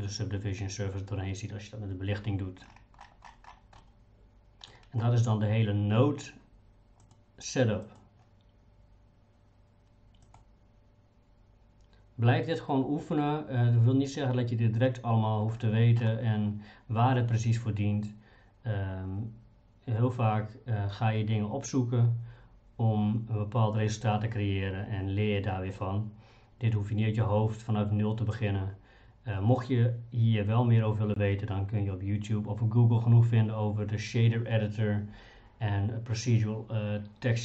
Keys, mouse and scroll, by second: 3.8 middle click, 7.0 click, 10.4-14.4 drag, 14.8 click.